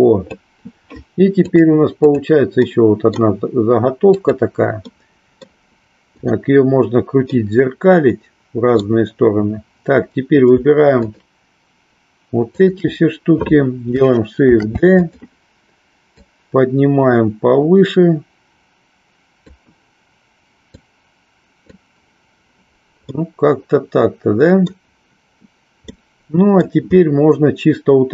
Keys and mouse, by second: 1.5 click, 2.8 middle click, 4.8 middle click, 6.3 click, 7.3-8.9 middle drag, 10.9 shift+click, 12.5 shift+click, 16.2-19.5 drag, 20.7-21.9 drag, 23.2-24.7 middle drag, 25.9 middle click.